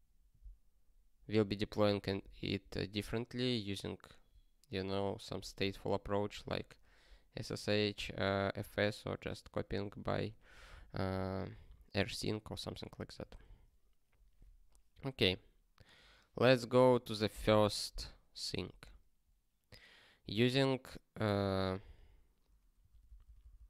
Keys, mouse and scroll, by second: 21.3 ctrl+n, 21.8 ctrl+p, 23.0 ctrl+p.